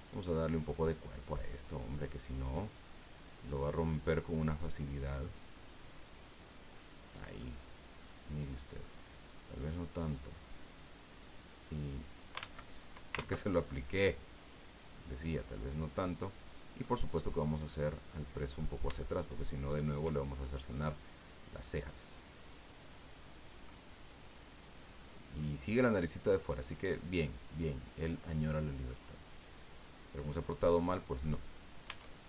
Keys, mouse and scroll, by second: 0.1-2.1 middle drag, 2.2-2.5 scroll up 1, 4.1-7.3 drag, 7.4-9.0 middle drag, 9.9-11.6 drag, 12.7 ctrl+z, 13.1 ctrl+z, 14.2-16.1 drag, 16.2 middle click, 17.5 right click, 17.9-18.8 middle drag, 19.2 shift+right click, 19.7 shift+right click, 21.1-23.7 drag, 23.7-29.0 middle drag, 29.6 scroll down 1, 30.2-31.3 middle drag, 31.8 Tab.